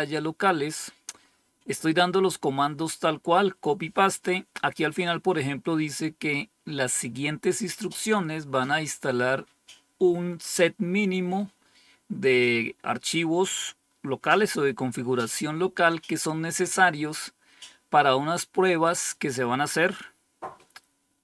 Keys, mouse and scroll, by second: 0.4-1.2 scroll up 5, 1.9-2.8 scroll up 2, 3.7-4.4 scroll up 1.